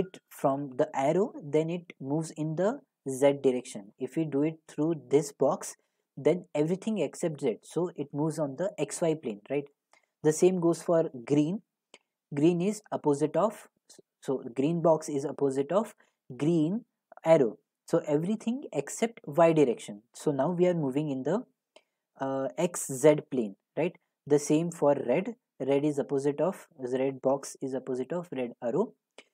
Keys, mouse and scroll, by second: 9.7 click, 23.8 click.